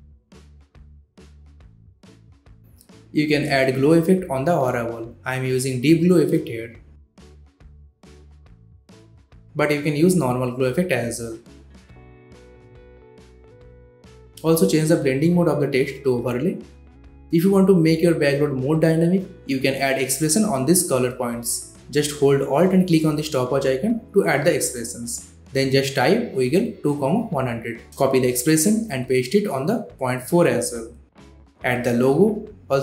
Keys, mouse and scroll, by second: 3.8-5.4 typing, 6.5-8.4 drag, 19.1 alt+click, 20.2-21.9 typing, 23.1 Return, 23.6-25.1 typing, 26.0 click, 27.0 ctrl+c, 27.2 click, 29.2 alt+click, 30.1 ctrl+v, 30.7 click, 31.4-32.7 typing, 32.6 click.